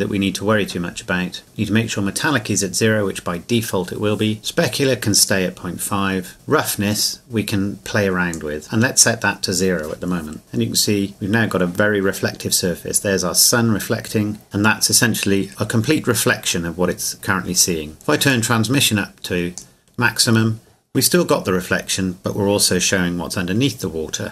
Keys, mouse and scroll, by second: 8.3 click, 10.5 scroll down 1, 18.3 click.